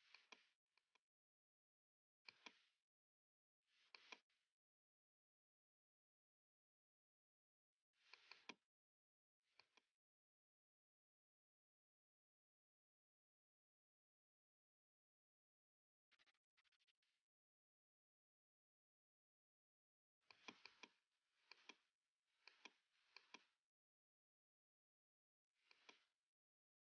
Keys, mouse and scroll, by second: 0.2 click, 1.8 0, 2.3 click, 3.4 click, 4.1 click, 4.2-6.6 typing, 8.2 click, 8.4 click, 10.2 click, 10.4 space, 12.4 space, 12.7 space, 15.1 space, 16.2-16.5 scroll, 16.5-16.9 scroll down 1, 17.3 scroll up 1, 17.8-18.4 scroll up 1, 20.4 click, 20.7 shift+click, 21.0 right click, 21.0 scroll up 2, 21.6 click, 22.5 click, 22.8 shift+click, 24.0-24.6 scroll down 1, 25.0 v, 25.5 scroll down 1, 26.1 scroll down 1.